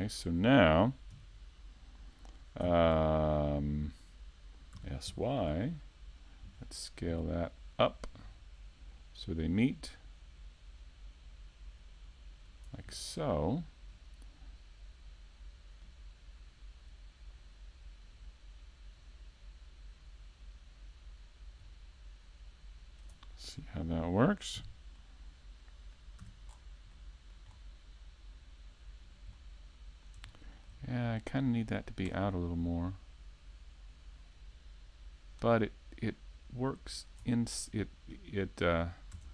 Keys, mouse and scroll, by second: 0.5 shift+middle click, 0.9 middle click, 1.7 shift+middle click, 2.1 middle click, 4.8-5.2 scroll down 3, 5.4 a, 5.7-6.0 scroll down 1, 6.0 middle click, 6.5 a, 6.8 a, 7.1-7.4 scroll up 2, 7.4 middle click, 8.4-8.8 scroll up 2, 9.5 a, 9.8 a, 10.5 Tab, 13.4 alt+click, 14.0 alt+click, 16.0 alt+click, 16.0 a, 16.3-17.2 scroll down 3, 16.7 middle click, 17.5-18.3 scroll up 4, 17.9 shift+middle click, 18.4 middle click, 22.8 right click, 23.7 KP_3, 24.6 KP_5, 24.9-26.2 scroll up 2, 25.3 shift+middle click, 26.2-26.5 scroll up 1, 26.5-27.2 scroll down 4, 26.9 middle click, 28.3 right click, 30.7 KP_5, 31.7 KP_5, 31.9 KP_3, 32.3-33.3 scroll up 3, 33.3-33.7 scroll down 3, 34.1 scroll up 1, 34.5 shift+middle click, 35.7 click, 39.0 middle click.